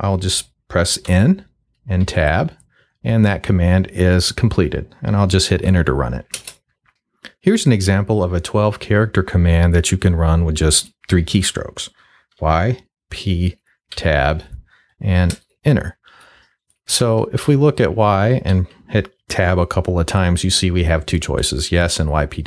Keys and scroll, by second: 1.0 n, 2.0 Tab, 6.3 Return, 12.3 y, 13.0 p, 13.9 Tab, 15.3 Return, 17.0 y, 17.4 Tab, 18.5 Tab.